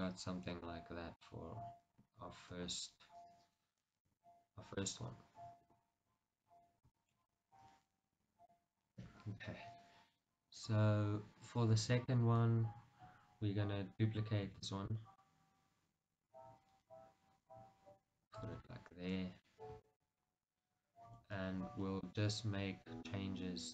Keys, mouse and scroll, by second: 0.2-0.6 scroll down 2, 0.6-10.8 middle drag, 2.7 KP_1, 4.2 KP_3, 5.8 KP_1, 6.6-7.1 scroll down 2, 9.0-10.8 scroll up 2, 10.8 KP_1, 12.9-13.3 scroll down 1, 14.7 shift+d, 18.5 click, 18.9 shift+middle click, 19.3 scroll up 1, 20.0 shift+middle click, 20.4-21.4 scroll up 1, 21.4 Tab, 21.9-22.3 scroll down 1, 22.7-23.7 middle drag.